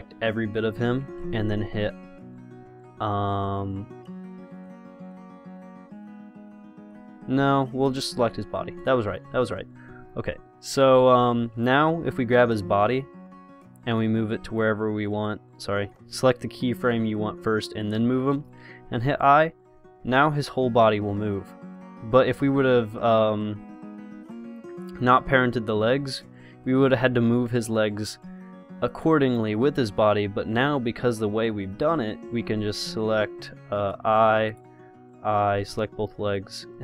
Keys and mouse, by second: 8.1-10.1 drag, 10.3-12.7 middle drag, 12.7-14.7 drag, 15.5 click, 19.2 i, 22.5 click, 25.3-28.5 drag, 29.1-32.8 drag, 34.1 i, 34.7 click, 35.1 i.